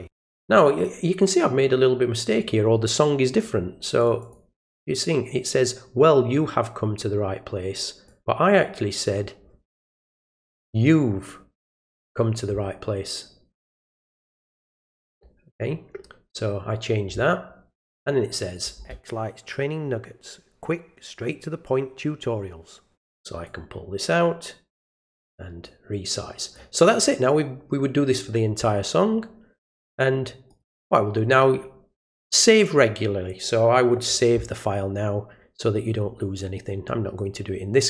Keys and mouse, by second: 4.0 click, 4.2 click, 8.1-9.1 drag, 14.5 click, 18.4 click, 23.4-24.8 drag, 25.6 click, 30.5 right click.